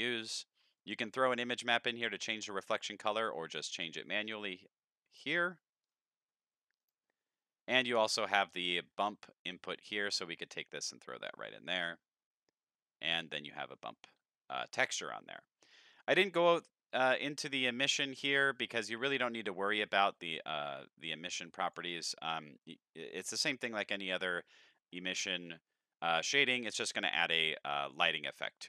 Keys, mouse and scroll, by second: 0.8-2.8 drag, 3.4 click, 4.4 click, 5.1 click, 5.8 click, 6.8 click, 8.0 click, 8.5 middle click, 8.9 middle click, 8.9-10.0 scroll down 7, 10.0-11.2 drag, 10.0 scroll down 1, 13.2-13.5 middle drag, 14.5 middle click, 15.7 middle click, 16.0-18.0 middle drag, 16.3-18.0 scroll up 6, 18.0-21.7 drag, 18.0 scroll up 1, 23.3 middle click, 23.7-24.9 middle drag, 25.2-28.6 middle drag.